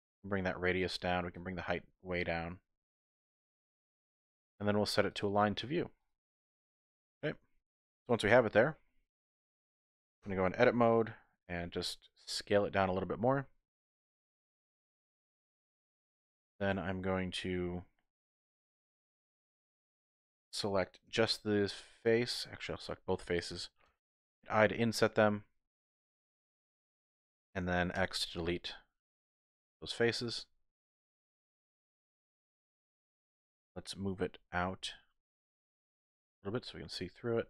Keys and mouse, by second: 1.5-3.7 drag, 5.3 click, 6.9 middle click, 8.3 KP_1, 10.2 Tab, 12.8 s, 14.8 click, 16.1 z, 20.2-23.9 typing, 21.3 click, 22.2 click, 25.8-26.6 typing, 26.1 click, 26.5 middle click, 27.9 x, 30.2 z, 31.4 click, 33.2 Tab, 34.8 g, 34.8 y.